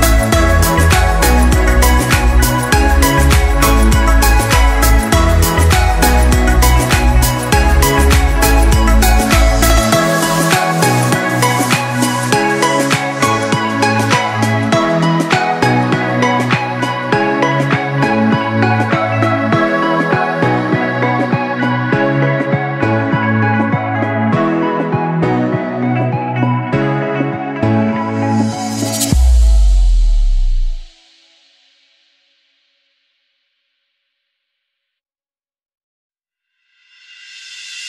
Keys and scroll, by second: 13.9-14.8 typing, 15.2 Return, 16.9 o, 17.4 l, 26.3 1, 26.8 6, 27.4 Return.